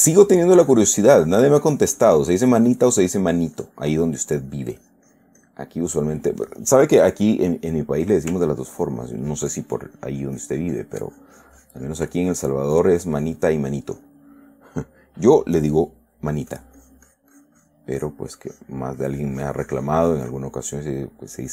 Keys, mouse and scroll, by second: 0.8-2.7 drag, 2.8 click, 3.7-5.1 drag, 6.1 middle click, 8.8-12.5 ctrl+drag, 12.5 ctrl+middle click, 13.1-14.6 ctrl+drag, 16.9-18.3 drag, 18.3-20.9 drag, 21.0 middle click.